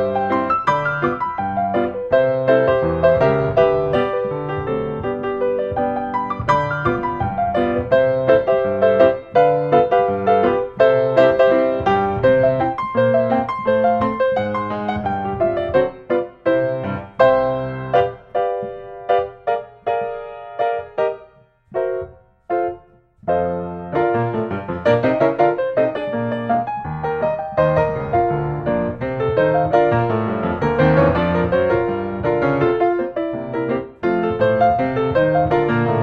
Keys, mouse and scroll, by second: 1.3 click, 2.1 5, 2.3 5, 3.1 Return, 6.3 5, 7.4 Return, 11.5-12.7 drag, 15.1-17.0 middle drag, 15.1 scroll, 15.8-16.2 scroll, 19.0-20.2 middle drag, 19.0-20.1 scroll, 20.1 scroll, 24.2 click, 25.0 click, 25.8 click, 27.0-28.1 drag, 28.9-30.0 middle drag, 33.6-34.7 drag, 33.9-34.7 scroll up 1.